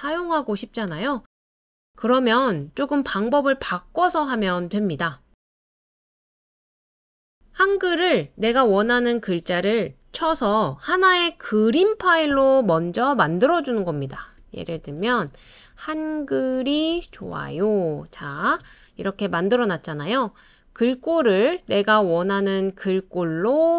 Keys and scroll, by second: 13.4-18.2 typing.